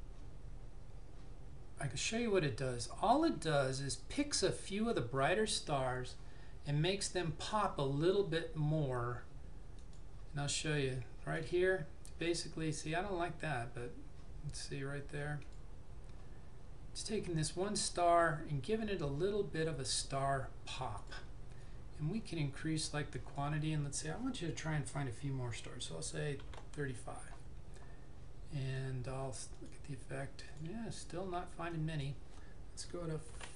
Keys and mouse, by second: 9.8 click, 15.6 click, 21.0 click, 26.6 typing, 29.7 click, 33.3 typing.